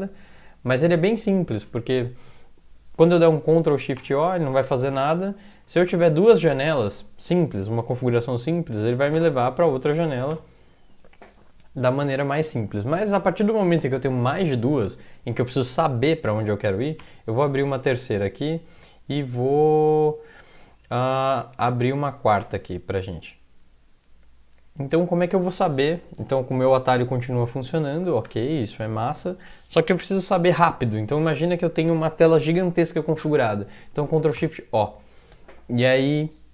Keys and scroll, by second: 3.7 ctrl+x, 4.0 o, 5.9 ctrl+\, 9.0 ctrl+x, 9.1 o, 10.0 ctrl+x, 10.3 o, 17.0 -, 21.5 ctrl+Tab, 22.4 -, 23.6 ctrl+Tab, 26.3 ctrl+Tab, 26.6 ctrl+Tab, 26.9 ctrl+Tab, 28.3 ctrl+\, 34.1 ctrl+x, 34.4 o.